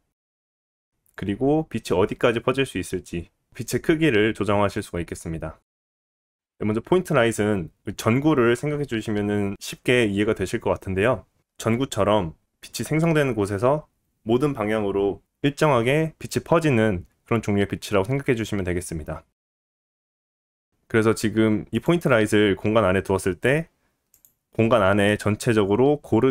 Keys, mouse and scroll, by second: 6.4 middle click, 6.7 middle click, 7.2-18.9 drag, 9.3 ctrl+z, 9.4 ctrl+z, 11.8 ctrl+z, 13.5 ctrl+z, 18.9 middle click, 19.2 click, 19.3 middle click, 19.8 click, 19.9 middle click, 20.4 click, 20.5 middle click, 20.9 click, 21.8-26.3 middle drag, 22.6 g, 25.2 scroll up 1.